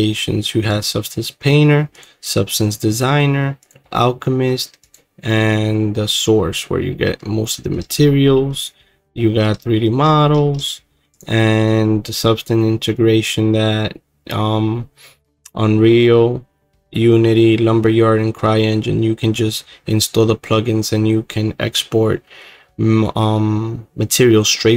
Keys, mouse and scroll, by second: 0.0 click, 0.8-6.9 drag, 6.9 middle click, 7.3-8.1 scroll, 8.6 click, 9.3 middle click, 9.3-11.2 scroll, 10.0 middle click, 11.2 click.